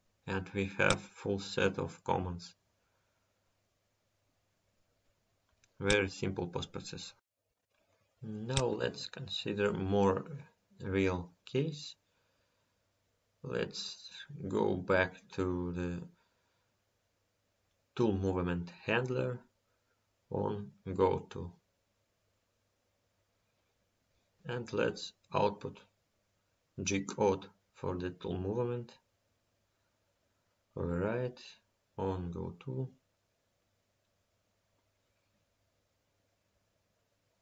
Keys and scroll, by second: 16.3 Home.